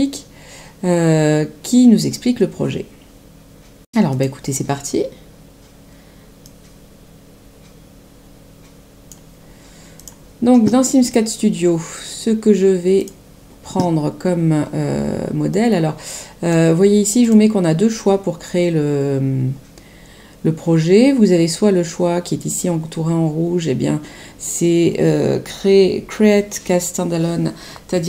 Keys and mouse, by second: 4.0 click, 6.4 click, 9.9 click, 12.9 click, 15.4 click, 17.2 click.